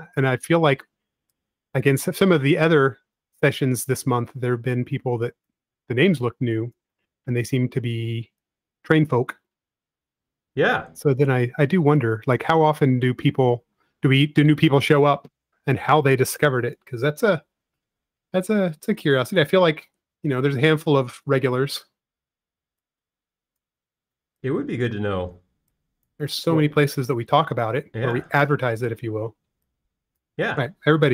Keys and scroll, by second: 13.5 space, 16.3 e, 18.2 typing.